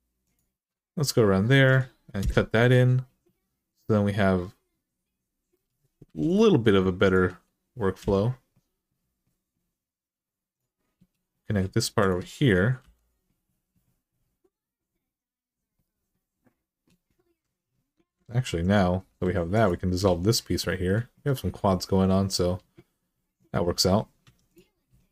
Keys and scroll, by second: 2.0 Return, 5.8 1, 7.8 j, 12.6 j, 17.1 2, 18.1 alt+z, 18.8 x, 19.8 alt+z, 24.0 1.